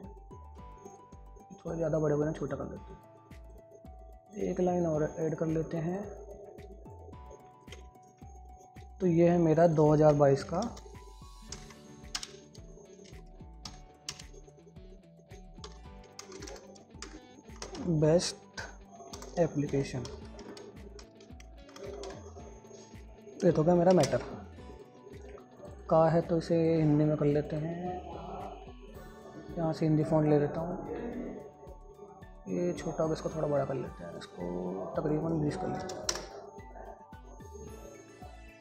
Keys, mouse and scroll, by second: 1.3-3.8 drag, 4.1 click, 7.9 ctrl+right click, 9.9 click, 10.3 ctrl+a, 12.6-14.5 typing, 15.7-18.6 typing, 19.5 Return, 19.8-22.9 typing, 24.3 ctrl+space, 25.1 click.